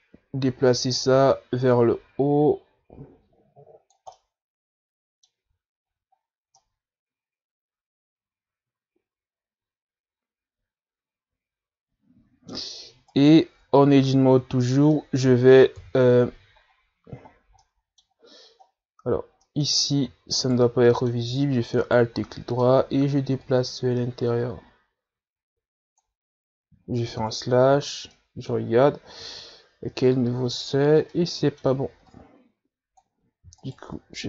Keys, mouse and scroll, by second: 0.7 click, 2.4 ctrl+z, 3.0-5.4 drag, 5.4-6.7 middle drag, 6.7 Tab, 7.1 a, 7.4-7.8 scroll down 3, 7.8-14.3 middle drag, 14.3 right click, 14.9 Tab, 15.2 a, 15.5 a, 16.2 middle click, 17.0 KP_3, 18.0-18.8 scroll up 5, 18.8 middle click, 19.4-19.9 scroll down 1, 19.9 scroll down 2, 20.7-21.7 middle drag, 21.7 alt+right click, 22.2 middle click, 23.1 alt+right click, 23.5-24.7 middle drag, 24.7-27.7 drag, 28.4 KP_Divide, 29.4 middle click, 30.0-31.6 scroll up 6, 31.6-32.1 scroll up 4, 32.1-32.4 scroll down 2, 32.4 middle click, 33.4-34.2 drag.